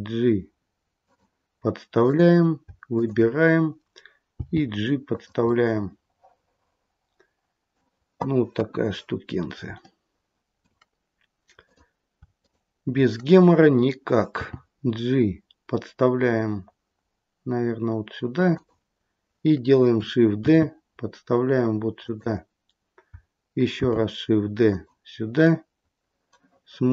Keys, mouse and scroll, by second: 1.9 click, 2.9 shift+click, 4.3 g, 5.4 middle click, 8.5 KP_1, 9.0-9.6 scroll up 1, 9.8 shift+middle click, 11.6 click, 12.3 shift+click, 14.3 g, 20.4 shift+d, 23.8 shift+d, 25.3 middle click.